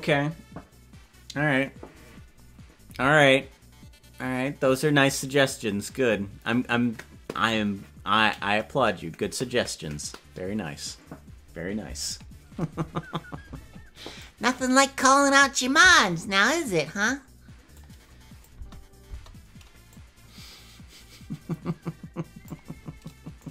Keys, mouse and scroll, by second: 14.2 click, 17.8 click, 18.5 space, 19.1 space, 20.0-22.5 drag.